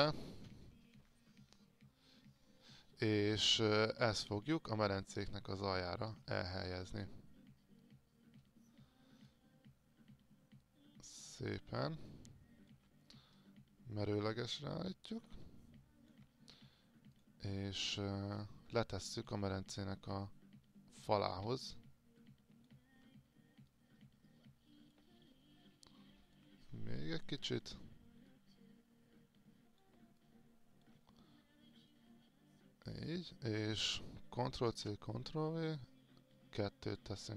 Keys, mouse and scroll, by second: 5.4 alt+click, 7.0-12.1 drag, 12.3 alt+click, 14.3-15.5 drag, 15.6 alt+click, 17.1 click, 19.0 alt+click, 20.1-22.9 drag, 23.9 click, 25.4-26.4 alt+drag, 27.5-30.1 drag, 30.4 alt+click, 31.9-33.7 drag, 34.7 ctrl+c, 34.9 ctrl+v.